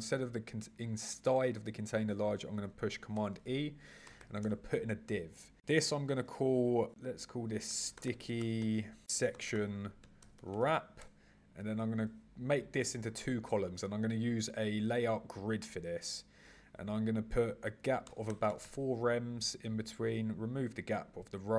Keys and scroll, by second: 3.2 super+e, 9.0 shift+-.